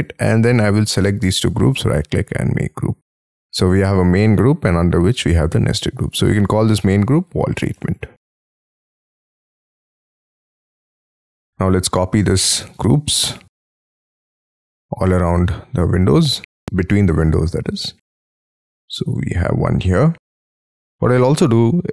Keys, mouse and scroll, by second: 0.6 ctrl+click, 1.4 right click, 6.7-9.4 typing, 10.3 scroll down 3, 10.7 middle click, 12.7 m, 12.9 scroll up 4, 14.6 scroll down 5, 15.1 shift+middle click, 15.6-16.2 scroll up 12, 16.6 shift+scroll up 4, 17.7 shift+click, 17.9 scroll down 6, 18.2 middle click, 19.0 space, 19.1 scroll up 5, 19.8 middle click, 20.2 middle click, 20.4 Escape, 20.6 Escape, 20.8 middle click, 21.7 middle click, 21.7-21.9 scroll up 6.